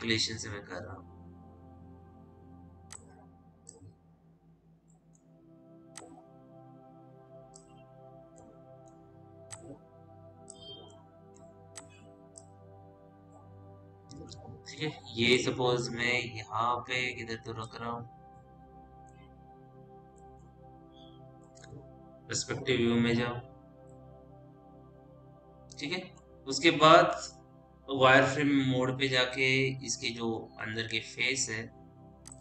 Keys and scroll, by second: 22.6 p, 29.3 F3.